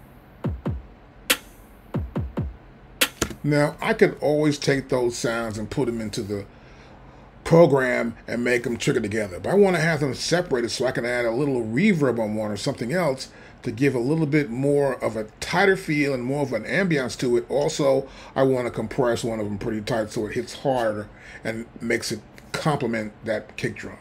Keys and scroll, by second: 3.2 space.